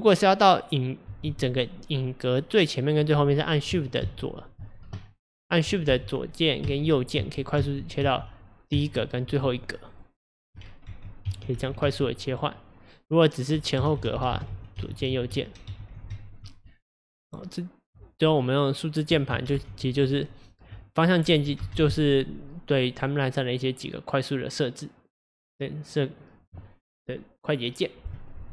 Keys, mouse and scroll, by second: 5.4 click, 5.9 shift+Left, 6.6 shift+Right, 7.2 shift+Left, 7.6 shift+Right, 8.0 shift+Left, 8.8 shift+Right, 10.0 click, 10.9 shift+Left, 11.3 shift+Right, 11.6 shift+Left, 11.8 shift+Right, 13.8 Left, 14.0 Left, 14.8 Right, 15.0 Right, 15.2 Right, 15.7-16.1 Left, 17.5-19.1 drag, 19.1 Left, 19.3 Right, 19.6 Left, 21.6 Down, 22.8-27.0 drag.